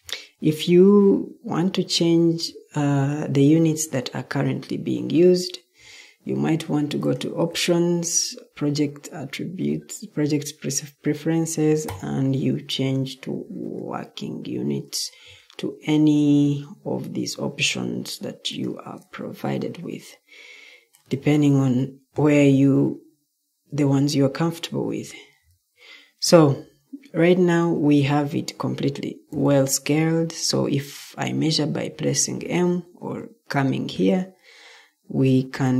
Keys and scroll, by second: 29.2 m.